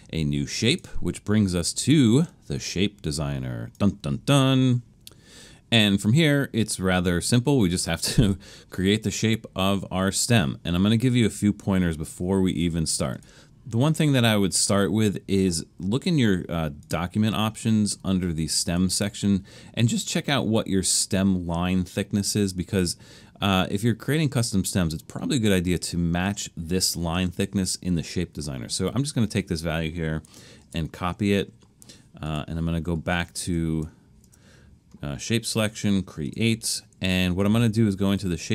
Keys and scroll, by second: 30.6 super+c, 34.2 Return.